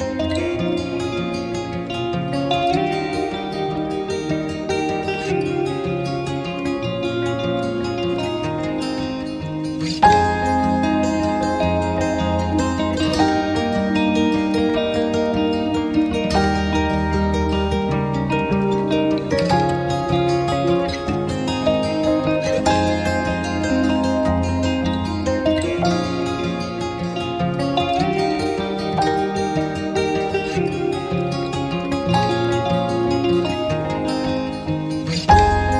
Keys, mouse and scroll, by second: 0.0 b, 0.3 scroll down 1, 0.4 scroll up 1, 0.5 scroll down 1, 0.7 alt+click, 1.3-1.6 scroll up 1, 1.8 Tab, 3.1 scroll down 1, 3.3 alt+click, 7.1 right click, 9.3 alt+click, 9.4 right click, 9.8 scroll up 1, 10.0 alt+click, 10.4 alt+click, 11.0 alt+click, 11.5 scroll down 1, 13.3 right click, 18.0 d, 21.1-21.5 scroll down 1, 23.4 scroll up 1, 25.3 scroll down 1, 25.7 alt+middle click, 25.8 alt+click, 28.1 right click, 29.7-30.0 scroll up 1, 30.0 alt+click, 30.4 alt+scroll up 1, 30.6 right click, 31.2 double click, 31.9 alt+click, 32.1 alt+middle click, 32.2 scroll up 1, 32.3 alt+click, 32.6 alt+middle click, 33.0 double click, 33.2 scroll down 1, 33.3 alt+click, 34.2 scroll up 1.